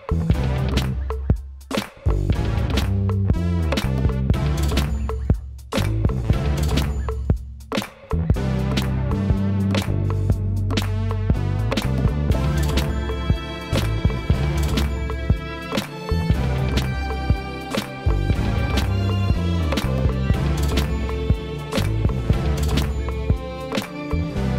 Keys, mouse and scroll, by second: 0.9-18.7 drag, 20.5-22.3 shift+middle drag, 22.3 shift+click.